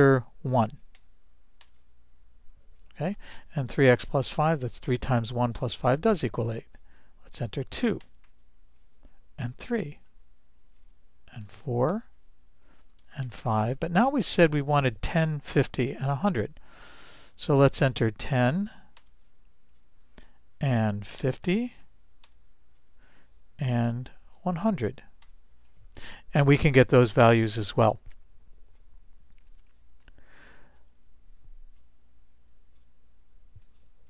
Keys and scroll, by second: 1.0 1, 2.0 Return, 7.7 2, 8.1 Return, 9.5 3, 9.9 Return, 11.6 4, 12.0 Return, 13.0 5, 13.3 Return, 17.8-18.8 typing, 19.1 Return, 21.3 5, 21.5 0, 23.5-24.6 typing, 26.0 Return.